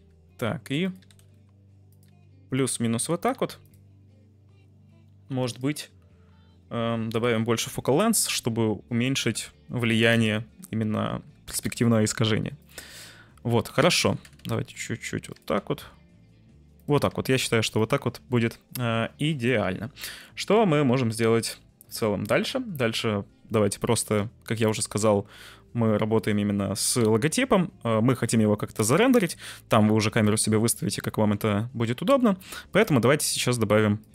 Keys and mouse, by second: 0.8 click, 1.0 g, 1.1 z, 1.3 z, 1.8 click, 2.0 g, 2.5 click, 3.3 g, 3.6 click, 5.5 drag, 7.2-10.2 drag, 10.0 0, 11.2 g, 11.4 z, 11.6 z, 12.5 click, 14.0-15.5 typing, 15.2 click, 16.7 click, 17.0 g, 17.7 click, 24.0 z, 30.0 shift+a, 33.4 s.